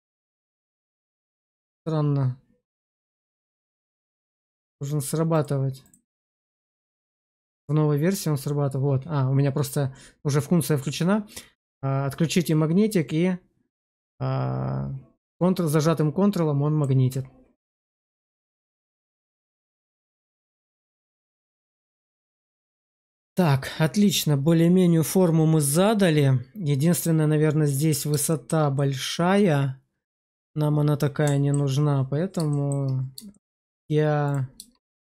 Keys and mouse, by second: 4.6 click, 6.0 click, 7.1 click, 18.1 middle click, 18.4 Tab, 19.4 shift+z, 20.3-20.9 middle drag, 21.1 shift+middle drag, 21.4-26.9 middle drag, 28.2 shift+middle click, 28.6-31.4 middle drag, 32.4 shift+middle drag, 33.2 shift+middle drag, 34.7 click.